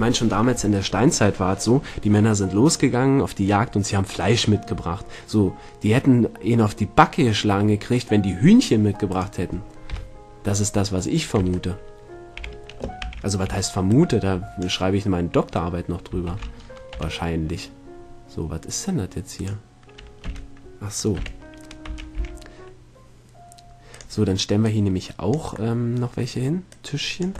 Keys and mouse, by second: 0.0 Tab, 9.3 right click, 10.1 KP_7, 11.0 right click, 11.6 Tab, 12.6 a, 13.2 a, 13.6 b, 16.5 shift+d, 19.6 click, 20.4 g, 24.8-25.9 drag, 25.9-26.9 middle drag, 26.9 click, 27.2 middle click.